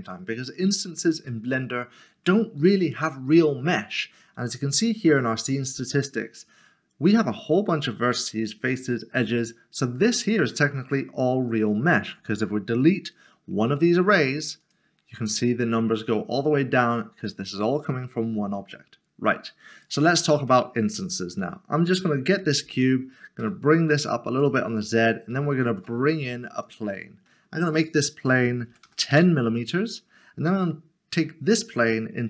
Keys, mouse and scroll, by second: 14.6 middle click, 14.7 click, 19.7 click, 20.3 s, 20.7 shift+middle click, 23.4 g, 24.8 middle click, 25.6 a, 26.6 click, 27.1-27.9 scroll down 1, 27.9 click, 28.8 typing, 29.8 Return, 30.0 scroll down 1, 30.6 middle click.